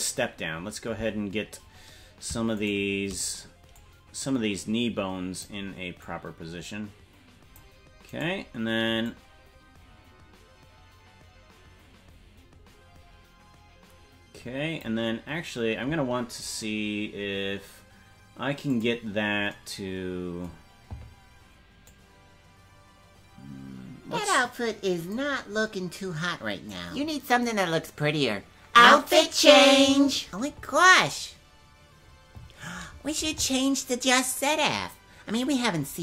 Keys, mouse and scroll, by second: 2.7 shift+right click, 3.7-5.5 drag, 6.0-7.6 drag, 8.2 right click, 9.0-14.9 drag, 18.7 click, 21.8-25.2 drag, 26.7-28.9 drag.